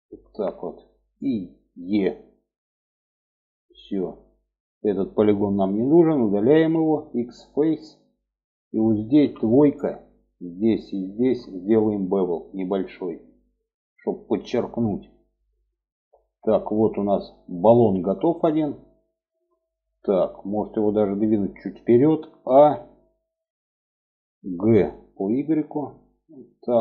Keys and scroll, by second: 1.2 e, 5.8 x, 8.5 2, 21.8 a, 23.9 g.